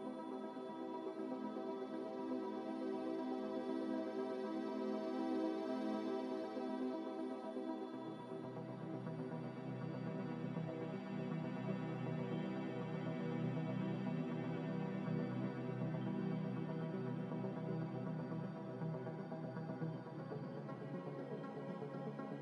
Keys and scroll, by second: 15.6 a.